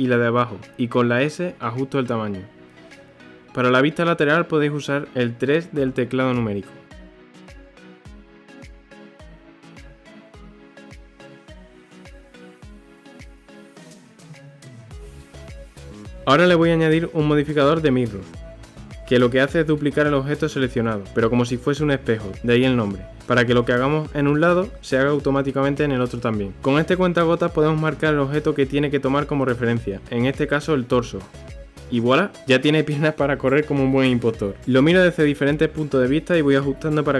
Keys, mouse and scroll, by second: 0.0 click, 0.5 KP_1, 1.1 s, 2.4 g, 4.0-5.2 middle drag, 5.8 Tab, 6.8 g, 11.4 s, 12.2-12.5 middle drag, 12.5 KP_3, 13.0-13.4 middle drag, 13.4 Tab, 14.2 KP_3, 14.6 s, 15.9-17.0 middle drag, 17.0 Tab, 17.4-22.2 middle drag, 22.2 click, 22.9-25.9 drag, 28.1 click, 30.2 KP_1, 31.6-32.6 scroll up 1, 32.6-34.0 shift+middle drag, 34.0 click, 34.4 Tab, 35.2-36.0 scroll down 1, 36.2-37.1 middle drag.